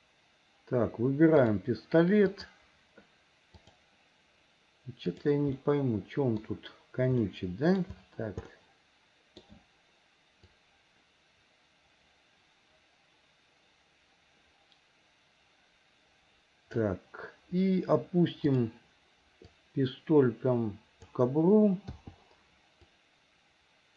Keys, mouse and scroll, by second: 1.5 click, 2.4 click, 3.7 click, 5.1 click, 5.6 middle click, 7.3 middle click, 8.5 middle click, 10.6-16.9 drag, 18.5 click, 19.5-21.3 drag, 23.0-23.9 drag.